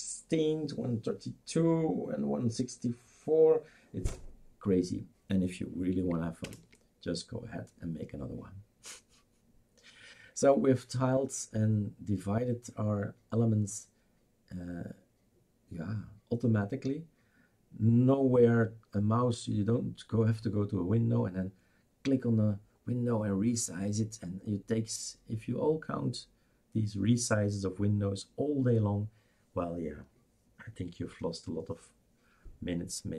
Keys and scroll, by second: 6.4 super+Return.